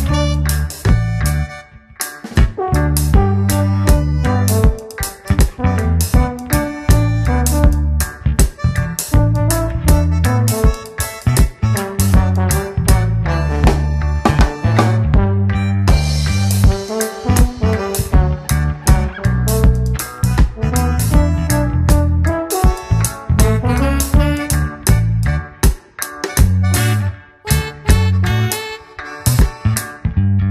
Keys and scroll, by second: 0.2 shift+F2, 0.7 space, 2.3 ctrl+shift+q, 3.7 ctrl+shift+q, 3.9 space, 4.8 shift+F2, 5.5 b, 7.0 Return, 7.3 space, 7.9 ctrl+g, 9.7 ctrl+space, 10.1 Return, 14.0 space, 14.9 w, 16.7 Return, 17.7 ctrl+m, 18.8 Return, 19.6 ctrl+space, 20.5 space, 22.1 Return, 23.0 ctrl+m, 24.0 Return, 24.5 ctrl+d, 24.7 space, 25.6 s.